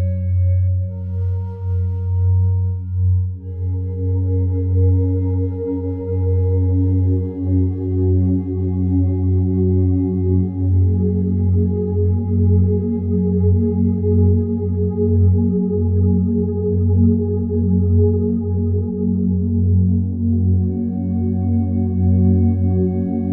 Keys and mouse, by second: 0.0-0.4 typing, 1.1-2.2 drag, 2.7-3.8 typing, 3.3 click, 5.3-5.9 drag, 6.8 shift+click, 7.8-8.3 typing, 8.4-10.2 drag, 10.0-10.7 typing, 10.9 click, 11.6 shift+click, 11.8 shift+drag, 12.4-13.1 typing, 13.1-13.8 drag, 14.0 shift+click, 14.2-14.7 shift+drag, 14.7-15.6 typing, 15.4 click, 16.5 click, 17.5-17.9 typing, 18.0 click, 18.8 shift+click, 19.0-19.6 shift+drag, 19.9 typing, 20.2 click, 21.0 click, 22.1 typing, 22.4 click, 23.2 click.